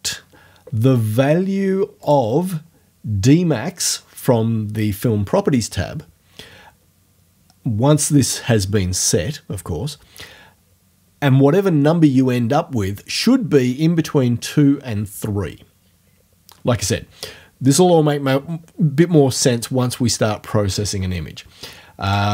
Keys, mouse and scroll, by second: 2.1 click, 22.1 click.